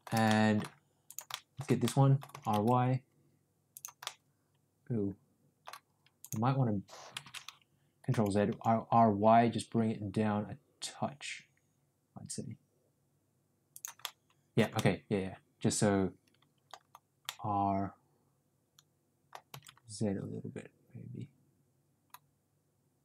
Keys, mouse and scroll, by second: 0.2 middle click, 1.1 click, 1.3 middle drag, 1.8-2.2 middle drag, 2.3 r, 4.0-5.7 middle drag, 6.2 click, 7.5 ctrl+z, 8.0 r, 14.0-14.5 middle drag, 14.7-16.6 middle drag, 17.1-19.4 middle drag, 19.5 r.